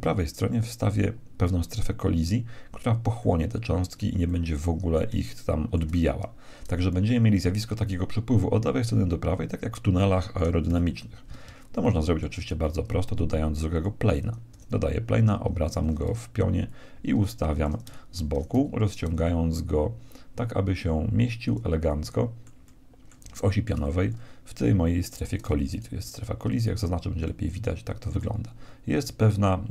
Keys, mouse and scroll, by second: 3.1-7.1 middle drag, 10.6 KP_1, 11.7-13.7 middle drag, 12.5 shift+a, 14.5 r, 16.6-18.6 drag, 18.4 s, 21.9-25.7 middle drag, 25.7-27.6 right drag, 27.2-29.7 middle drag.